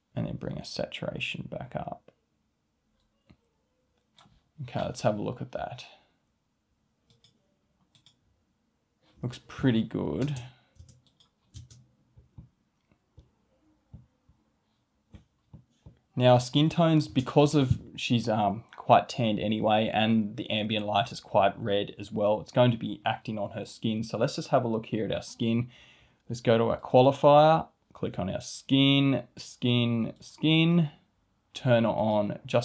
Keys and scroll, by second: 10.2 space, 17.1 space.